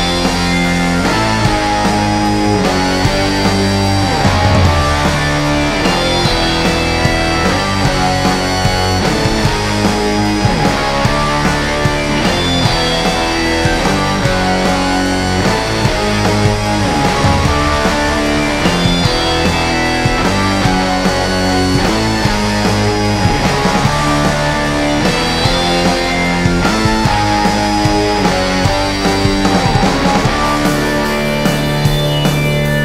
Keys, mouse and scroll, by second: 0.1-4.6 alt+shift+drag, 5.0 click, 5.3-11.7 shift+drag, 14.5-18.9 drag, 18.9 ctrl+z, 20.6-23.5 shift+drag, 23.5 alt+scroll up 1, 24.3-27.4 drag, 27.4-31.4 shift+drag, 31.4 alt+scroll down 1, 31.6-32.1 alt+scroll up 2, 32.7-32.8 scroll up 1.